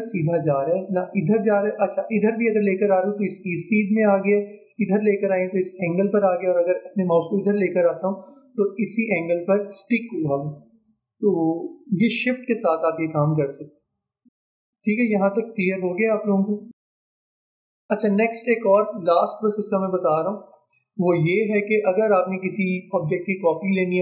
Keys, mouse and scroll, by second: 17.8-18.4 alt+scroll up 1, 18.4 alt+scroll down 1, 19.3 space, 19.6 click, 19.8 space, 20.4-24.0 drag.